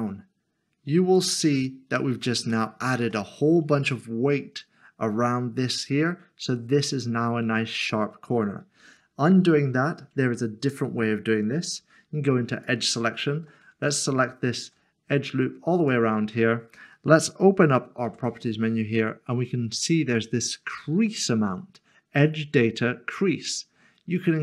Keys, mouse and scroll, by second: 1.1 click, 1.6 middle click, 2.5 shift+middle click, 8.8 ctrl+z, 12.5 2, 13.8 alt+click, 15.8 shift+click, 18.1 n, 24.2 click.